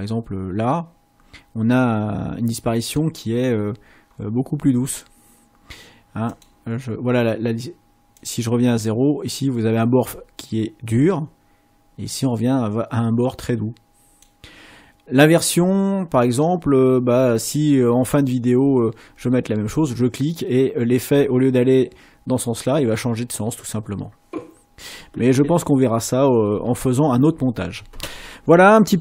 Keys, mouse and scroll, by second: 2.8 click, 3.6-4.3 scroll up 4, 6.3 click, 8.1 click, 11.8-14.4 drag, 17.1 middle click, 18.3 middle click.